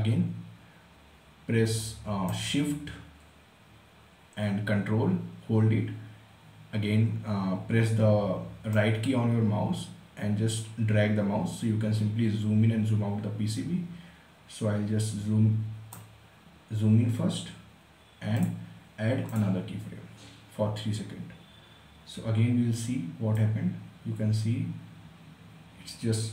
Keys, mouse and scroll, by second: 1.4-4.2 right drag, 4.5-17.9 right drag, 17.9 click, 22.9-26.3 drag.